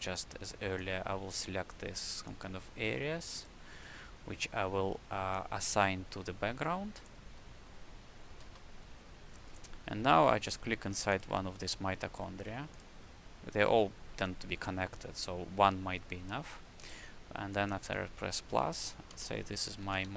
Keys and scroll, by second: 8.4 shift+r, 10.0 w, 12.0 c, 19.5-20.1 typing.